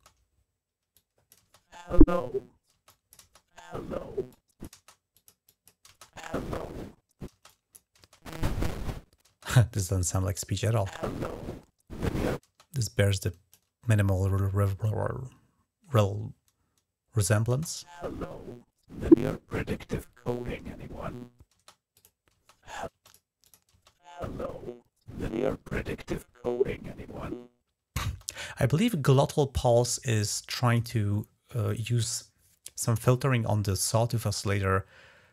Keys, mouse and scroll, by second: 0.7-2.5 drag, 1.2 space, 2.5 space, 2.7-3.9 drag, 3.0 space, 4.1-4.8 drag, 4.5 space, 4.9 click, 7.2 click, 9.2 click, 12.2 space, 12.5-13.5 drag, 17.3 space, 21.3 space, 21.7 click, 22.1 space, 22.7 space, 22.8 click, 23.2 click, 23.5 space, 27.8 space, 29.8-30.6 drag.